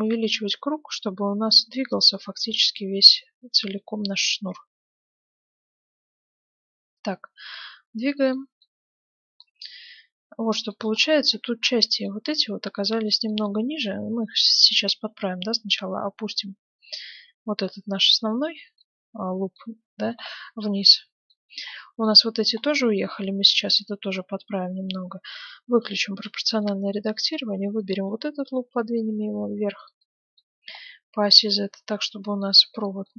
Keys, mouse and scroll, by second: 8.6-10.5 middle drag, 10.9-11.3 scroll up 1, 11.3-11.8 scroll down 1, 11.8-15.0 middle drag, 15.0 g, 18.8-22.2 middle drag, 22.2 scroll up 1, 22.3-23.8 middle drag, 23.8-24.3 scroll down 1, 25.2-26.9 drag, 26.3-28.0 middle drag, 27.2-29.5 right drag, 28.4 g, 30.0-32.7 middle drag, 31.4 g, 32.7 scroll up 1, 32.9 scroll down 1, 33.0 middle click.